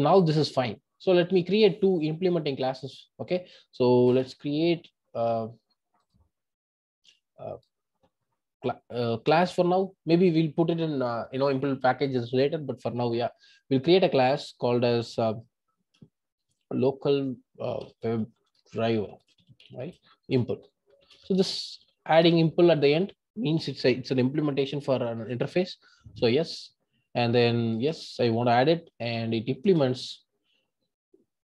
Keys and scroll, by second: 4.2 super+n.